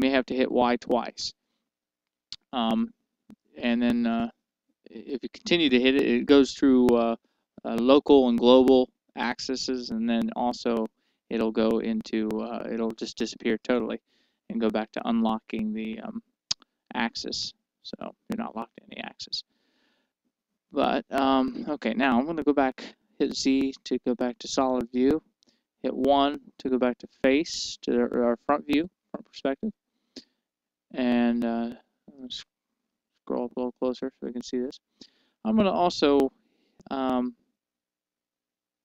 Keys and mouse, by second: 23.3 z, 26.7 KP_1, 30.1-36.8 middle drag.